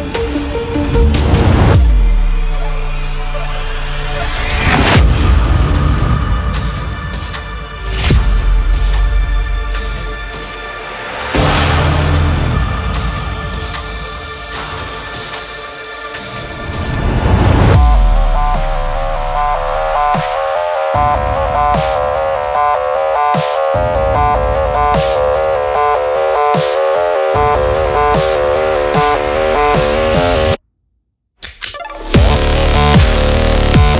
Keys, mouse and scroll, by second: 0.2 Right, 2.2 click, 2.5 click, 5.3 scroll down 1, 5.6 scroll up 1, 6.3 space, 6.5 click, 6.7 space, 7.4 click, 7.6 space, 8.6 click, 10.7-18.6 drag, 18.6 ctrl+d, 19.3 click, 22.0 click, 23.8 typing, 24.1-33.5 drag, 33.5 ctrl+t.